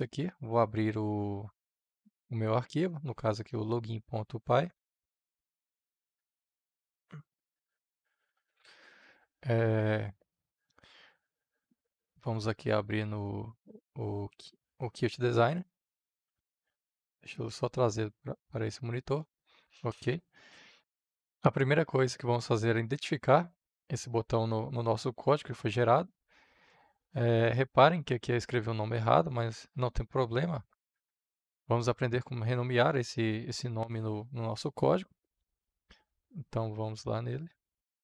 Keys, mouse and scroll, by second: 10.1-12.6 middle drag, 10.1 scroll, 12.6-31.0 drag, 31.0 ctrl+c, 37.4-38.0 drag.